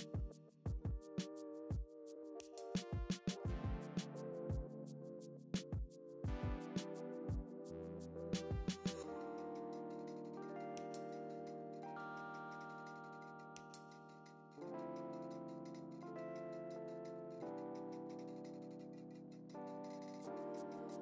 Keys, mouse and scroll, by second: 0.0 click, 0.4-0.9 scroll down 2, 0.6-3.9 typing, 0.9 scroll up 1, 1.0 scroll down 1, 1.2 click, 2.0 click, 2.2 scroll down 1, 4.1-4.6 scroll up 1, 5.0 g, 5.7 click, 6.6 g, 11.4 scroll up 1, 11.8 g, 12.9 click, 13.0 alt+a, 16.5 click, 16.6-17.0 scroll down 2, 16.8 KP_1, 17.0 `, 17.2 a, 17.5 ctrl+v, 17.6 scroll down 1, 17.8 click, 18.0 s, 18.7 click, 19.4 KP_Decimal, 19.4-20.3 scroll up 2.